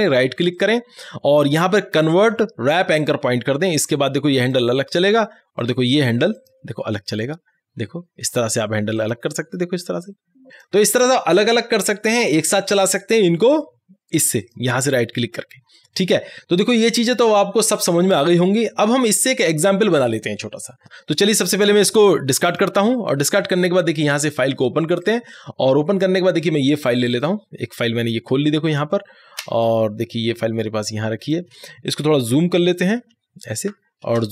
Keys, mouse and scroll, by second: 0.6 right click, 3.1-13.2 drag, 14.5 click, 14.8 right click, 22.6 click, 29.4 space, 29.7 click, 30.0 space, 34.2 space.